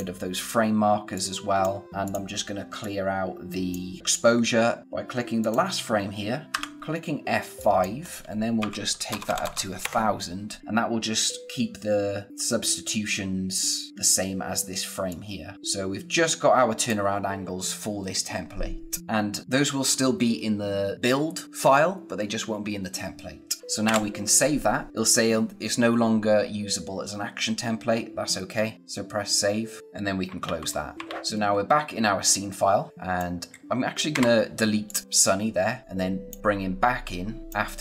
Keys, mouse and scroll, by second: 4.8 click, 5.4 click, 7.5 click, 9.8 Return, 15.0 click, 23.6 ctrl+Num_Lock, 23.8 ctrl+s, 30.2 ctrl+Num_Lock, 30.4 ctrl+f, 31.0 f, 31.3 click, 31.4-31.9 scroll down 1, 32.9 click.